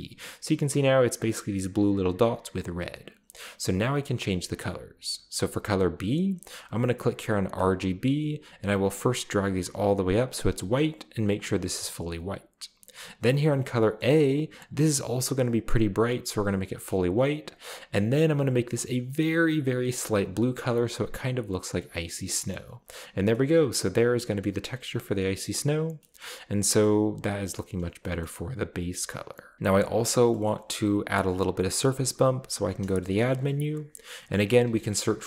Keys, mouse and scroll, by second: 0.0-0.9 scroll up 2, 2.9-3.6 scroll down 1, 5.5 click, 7.6 click, 8.7 click, 9.5 click, 10.3 click, 11.4 click, 13.7-14.6 scroll down 3, 13.8 middle click, 14.0-14.4 middle drag, 14.6 click, 16.3 click, 17.5 click, 18.4-19.5 drag, 20.1 click, 20.7-21.8 drag, 22.4 scroll down 1, 23.0-23.7 scroll down 2, 24.4 middle click, 24.5-25.4 scroll up 3, 25.9 scroll down 2, 26.0 middle click, 26.3 middle click, 26.4-27.3 scroll down 2, 27.3 click, 27.7-28.2 scroll down 2, 27.8 shift+drag, 28.3-29.1 shift+middle drag, 29.1-29.5 scroll down 1, 29.5-30.5 scroll up 1, 30.0 click, 32.6 shift+a, 33.3 shift+click, 34.4-34.9 typing.